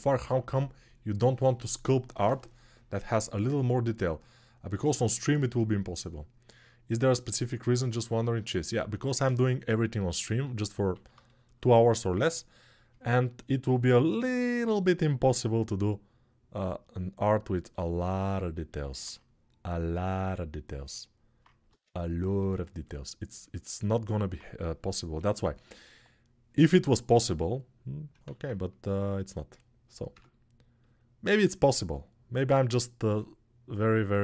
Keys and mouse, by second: 12.3 click, 15.0-17.9 drag, 17.9-22.3 ctrl+alt+right drag, 21.4 ctrl+Tab, 22.3-34.2 alt+drag, 24.9 KP_3, 28.0 alt+z, 29.9 Tab.